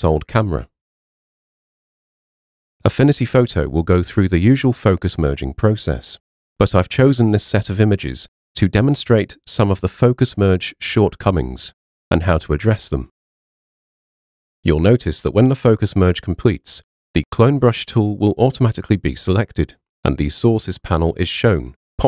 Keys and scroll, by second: 0.0 super+a.